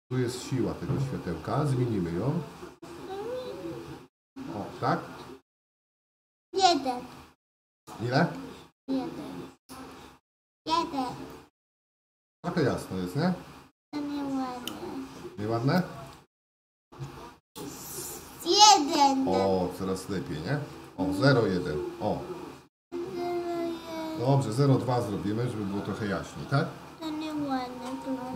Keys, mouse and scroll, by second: 1.7-10.1 drag, 16.7 click, 27.6-28.3 shift+middle drag.